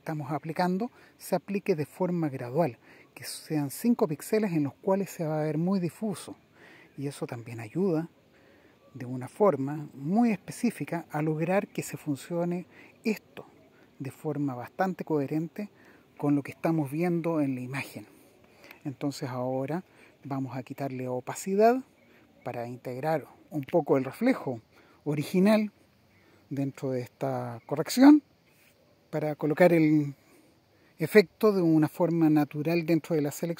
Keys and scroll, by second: 13.2 Down, 16.6 Down, 17.5 Up, 19.3 Down, 19.7 Down, 27.2 super+-, 27.6 super+-, 27.8 super+-, 28.1 super+-.